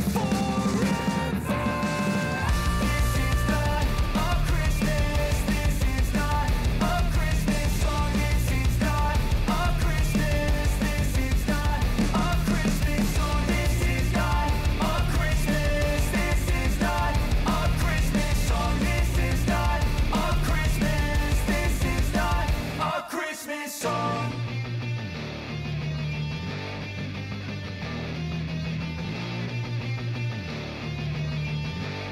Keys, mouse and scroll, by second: 0.8 ctrl+shift+c, 1.8-4.0 typing, 5.2 ctrl+d, 5.6 s, 6.6-9.2 drag, 9.5 ctrl+d, 10.0 s, 10.4-17.0 drag, 17.0 Page_Down, 17.8 click, 18.5 [, 19.0 Page_Down, 19.9 click, 20.2 [, 20.7 space, 23.1 click, 23.5 space, 25.8 click, 26.7 [, 28.1 click, 29.3 [, 29.8 space.